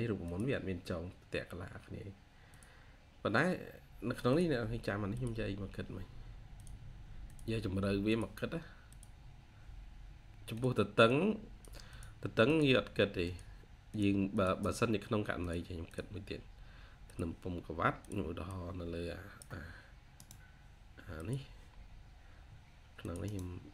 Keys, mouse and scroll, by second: 14.2 double click, 15.7 double click, 16.2-17.3 scroll up 1, 18.3 double click, 20.0 right click, 21.6-22.6 scroll down 1, 23.1 right click.